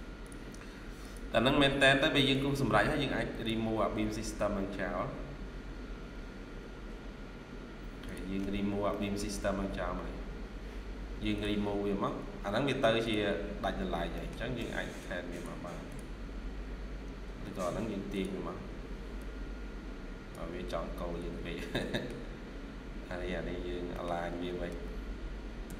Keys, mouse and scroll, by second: 2.1 Escape, 2.4 Escape, 3.9 Escape, 8.5 scroll down 1, 8.8 middle click, 12.3-12.8 scroll up 2, 12.4 Escape, 14.0 middle click, 14.4 typing, 16.8-17.1 scroll down 1, 17.1 typing, 17.2 Escape, 17.4 Escape, 18.4 scroll up 1, 21.0 Escape, 21.4 scroll down 1, 21.8 middle click, 22.0 scroll down 1, 23.8 middle click, 24.2-24.6 typing, 25.5 Tab.